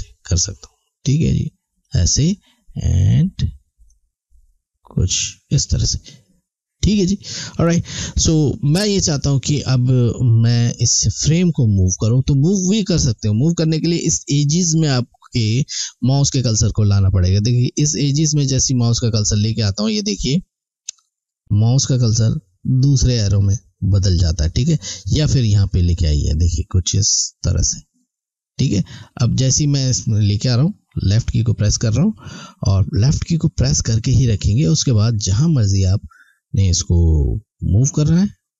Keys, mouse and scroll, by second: 28.6 click.